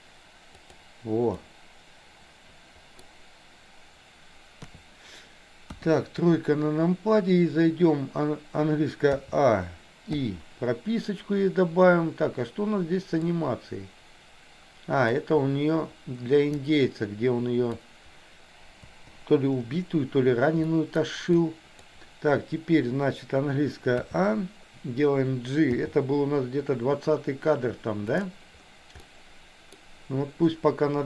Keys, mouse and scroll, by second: 1.5-3.0 middle drag, 4.5 KP_3, 5.8 KP_1, 9.2 a, 10.2 i, 13.3-15.2 drag, 16.7-17.8 drag, 18.9 Delete, 20.7 middle click, 21.3 click, 24.0 a, 25.8 g, 29.2 middle click.